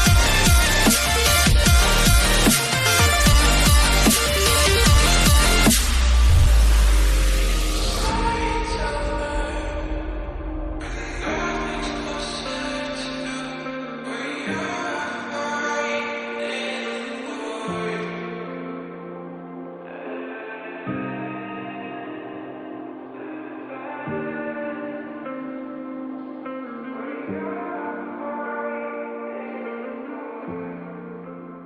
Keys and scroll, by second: 0.2 ctrl+z, 4.0 ctrl+z.